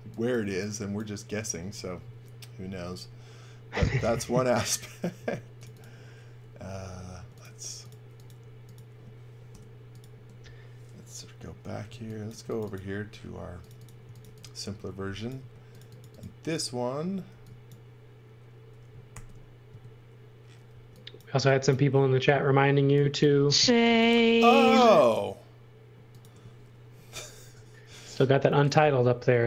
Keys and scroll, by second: 5.1 space, 6.6 e, 7.1 space, 9.4 Delete, 11.8 x, 12.2 space, 13.7-15.3 typing, 17.3 e, 19.1 shift+3, 19.6 space, 20.7 e, 22.2 space, 23.8 m, 28.7 l.